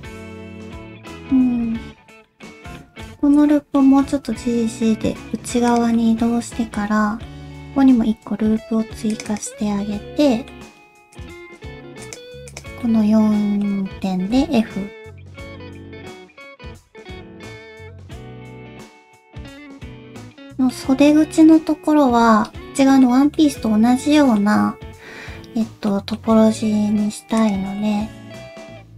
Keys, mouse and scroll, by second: 0.0 alt+click, 0.2 alt+z, 0.3 middle click, 1.4 scroll up 1, 1.6 alt+z, 2.2 middle click, 2.7 middle click, 3.2 alt+z, 3.5 middle click, 3.9 g, 5.9 middle click, 8.0 ctrl+r, 8.3 ctrl+r, 9.6 middle click, 11.1 click, 11.6 shift+click, 11.9 ctrl+shift+z, 11.9 shift+click, 12.0 shift+click, 12.5 shift+click, 12.8 middle click, 14.3 f, 14.6 middle click, 15.2 shift+middle click, 15.4 middle click, 15.8 middle click, 16.6 click, 17.0 shift+click, 17.3 shift+click, 17.6 shift+click, 17.7 middle click, 18.1 middle click, 18.8 f, 19.0 middle click, 20.1 middle click, 21.1 middle click, 22.4 middle click, 23.3 middle click, 25.9 middle click, 27.4 click, 27.8 middle click.